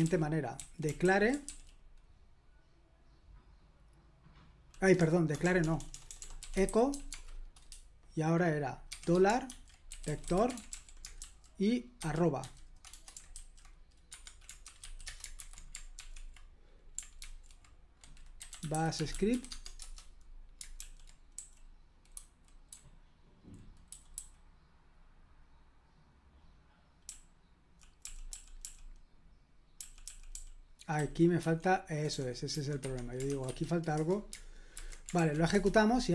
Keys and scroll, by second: 0.0-1.9 typing, 5.0-7.4 typing, 8.9-13.3 typing, 14.1 Escape, 14.4-15.3 typing, 15.4 super+h, 15.9 ctrl+p, 17.2 ctrl+c, 18.2-19.8 typing, 20.8 super+l, 21.3-24.4 typing, 27.1-28.0 typing, 29.8-33.8 typing, 32.8 Escape, 33.9 Return, 34.7 super+h, 35.1 ctrl+p, 35.5 Return.